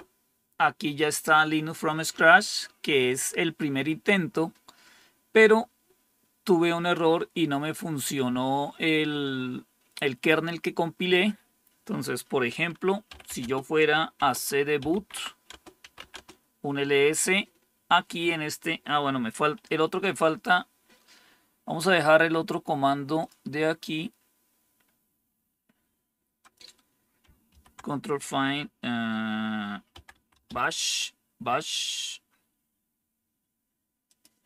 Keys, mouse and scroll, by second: 0.0-0.2 typing, 12.7-16.2 typing, 15.4 Return, 23.1 click, 24.7-25.2 scroll down 3, 26.3 click, 27.4 ctrl+f, 29.6-30.9 typing, 34.0 click.